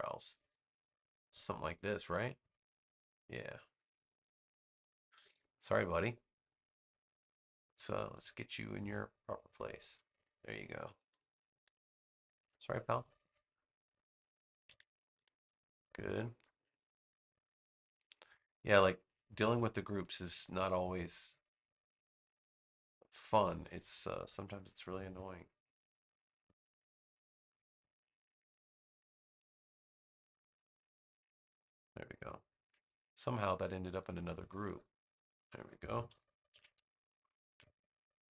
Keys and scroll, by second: 11.5 space, 15.0 super+g, 15.6 space, 32.5 super+g, 33.0 space, 36.4 super+g, 36.8 space.